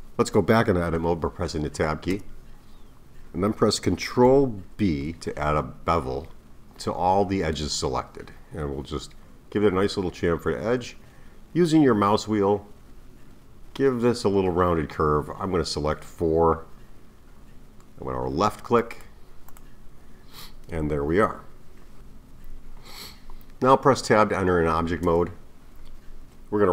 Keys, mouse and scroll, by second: 2.1 Tab, 4.8 ctrl+b, 19.5 click, 25.0 Tab.